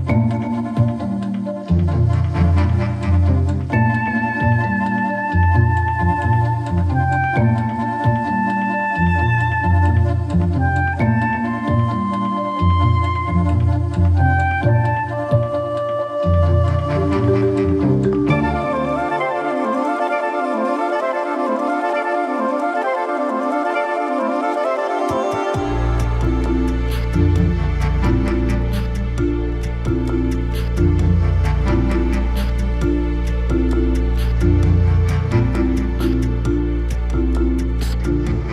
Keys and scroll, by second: 32.2 ctrl+z, 36.0 ctrl+z.